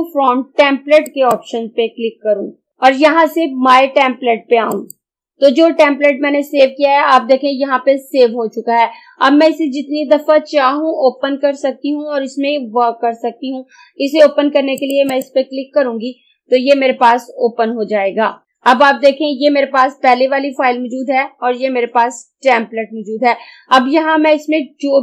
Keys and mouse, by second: 1.1 click, 4.8 click, 14.8 click.